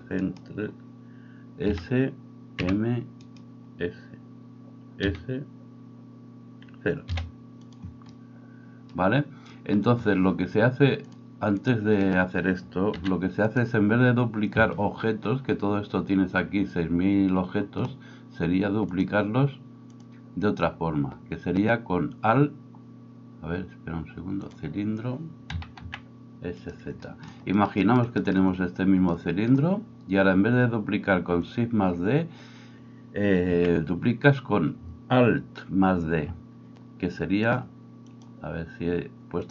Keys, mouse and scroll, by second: 1.6 s, 5.0 s, 11.1-26.9 drag, 12.9 x, 25.5 s, 26.9-37.5 shift+middle drag, 33.5 n, 38.3-39.5 middle drag.